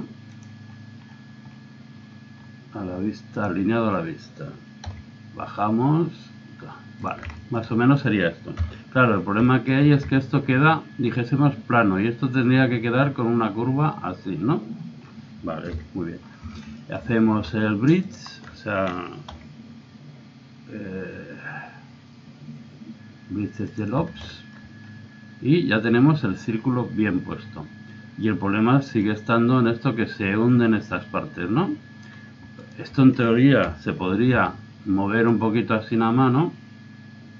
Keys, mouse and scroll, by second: 0.7-4.2 middle drag, 3.3-5.1 drag, 4.9 s, 7.4-8.4 drag, 8.6 KP_3, 10.0 z, 15.0 middle click, 15.8 KP_1, 16.2 click, 16.4 z, 18.1 right click, 18.3 middle click, 18.4 click, 19.3 w, 24.3-26.5 middle drag, 28.2-29.9 middle drag, 32.6-33.7 right drag, 33.7 KP_3, 34.3 z, 35.2-37.0 drag.